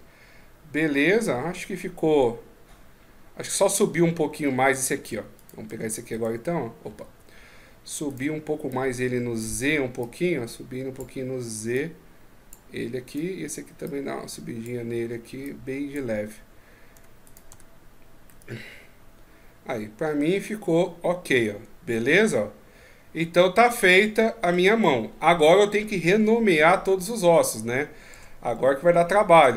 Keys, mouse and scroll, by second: 0.7 middle click, 4.8 Tab, 5.1 right click, 5.4 Tab, 5.9 right click, 7.9 right click, 8.5 click, 9.0 click, 9.2 click, 12.8 right click, 13.6 click, 15.2 click, 16.7 Tab, 17.0 right click, 17.3 Tab, 18.0 middle click, 27.9 Tab, 28.4-29.1 scroll down 1, 29.1 right click.